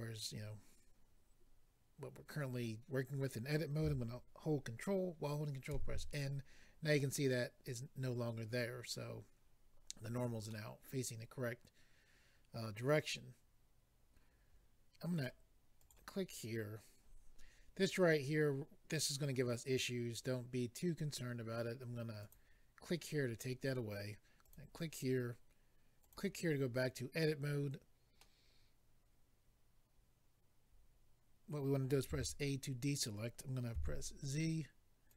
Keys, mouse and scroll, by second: 5.7 ctrl+n, 10.5 middle click, 15.1 click, 15.2 click, 15.8 click, 15.9 click, 22.2 click, 22.3 click, 24.4 click, 24.5 click, 26.0 click, 26.1 click, 27.6-28.1 scroll down 1, 28.1 middle click, 28.1-28.8 scroll down 1, 32.1 a, 35.1 click.